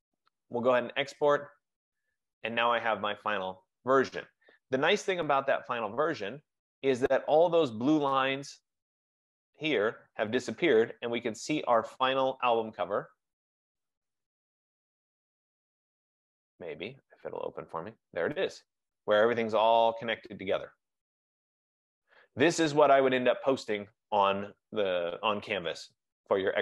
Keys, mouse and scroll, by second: 1.4 click, 4.6 click, 12.9 click, 13.1 click.